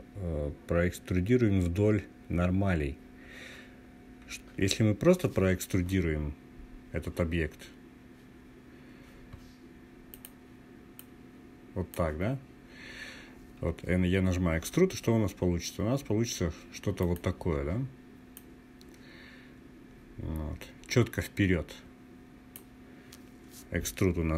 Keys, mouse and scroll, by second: 8.6 scroll down 2, 9.6 click, 9.6 scroll down 1, 10.4-11.7 drag, 14.0 e, 16.5 click, 17.8 click, 18.1-22.2 drag.